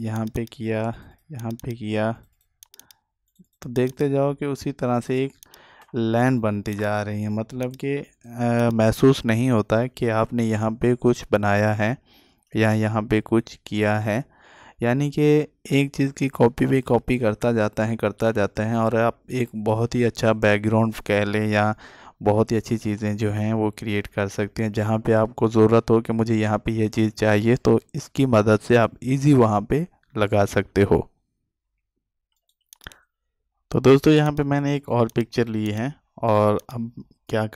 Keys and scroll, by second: 33.4 ctrl+space.